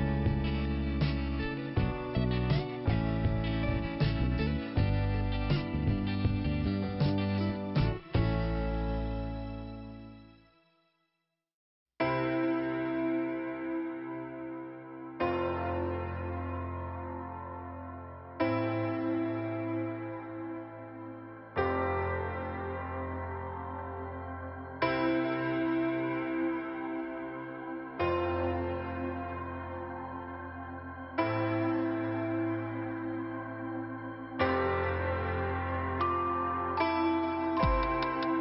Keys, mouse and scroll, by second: 0.5-1.1 scroll up 1, 1.5 click, 1.7 click, 3.3 click, 3.4 click, 5.1 click, 5.2 click, 5.6 middle click, 6.4 scroll up 1, 7.8 click, 7.9 click, 8.3 right click, 8.5 right click, 9.1 click, 9.3 click, 10.0 click, 10.4 click, 10.5 click, 10.6 click, 10.9 right click, 11.1 double right click, 11.5 click, 14.9 click, 17.4 click, 18.8 click, 24.6 click, 29.8 f, 31.0 middle click, 35.0 click, 35.0 click, 35.7 click.